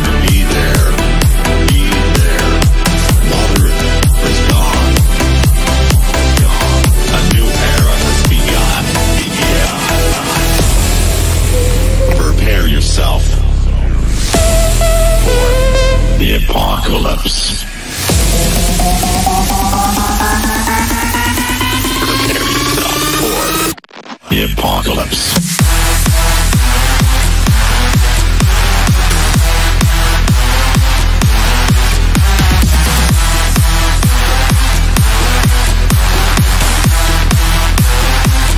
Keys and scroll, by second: 1.9 Right, 10.0 F3, 29.4 F3, 37.0 shift+F2.